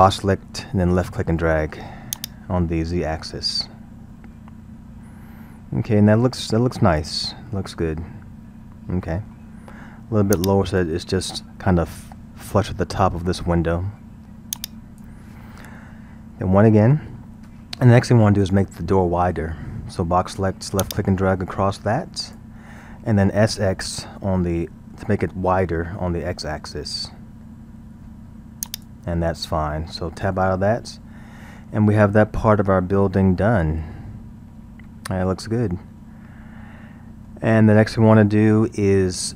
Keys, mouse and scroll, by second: 2.1-5.2 drag, 7.5-10.3 middle drag, 10.3-13.4 drag, 14.6-16.7 drag, 16.7 KP_1, 20.8 click, 24.0 s, 29.3-30.5 middle drag, 30.5 Tab, 31.0 scroll, 31.4-34.4 middle drag, 39.2-39.3 scroll.